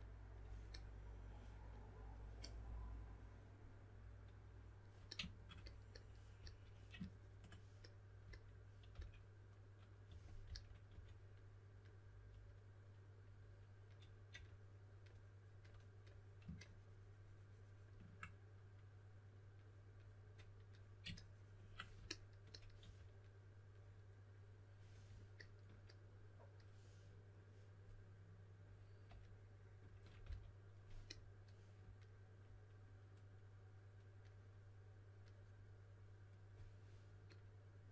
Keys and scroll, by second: 6.3 s, 8.9-11.4 typing, 14.3 typing, 22.8 4, 30.2 s.